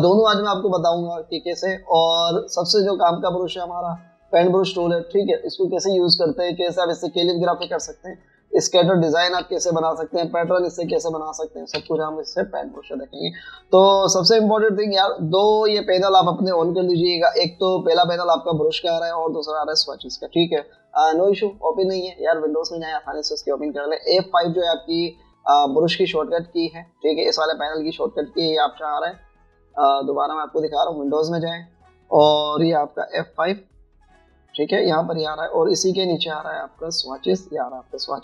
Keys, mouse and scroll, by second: 8.6 typing, 10.4 typing, 29.6 typing.